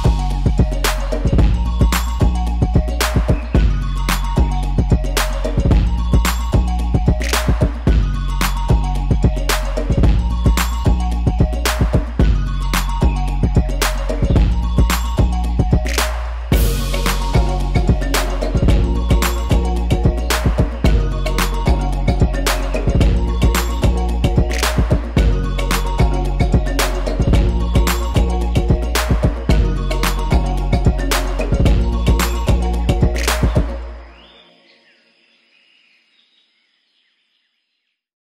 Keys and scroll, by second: 13.6 Left.